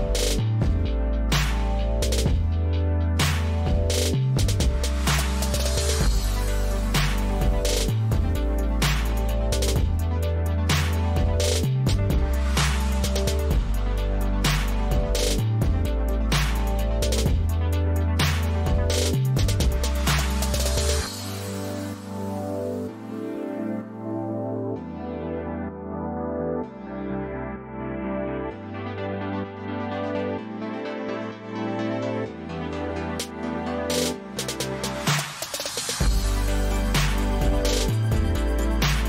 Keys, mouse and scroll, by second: 2.0-3.0 drag, 3.8 click, 5.3 click, 7.1-8.0 drag, 8.5-10.3 drag, 11.1 click, 12.6-13.6 drag, 15.3 click, 16.2 click, 17.5 click, 18.6 click, 19.4 click, 20.5 ctrl+c, 21.3 click, 22.6 ctrl+v.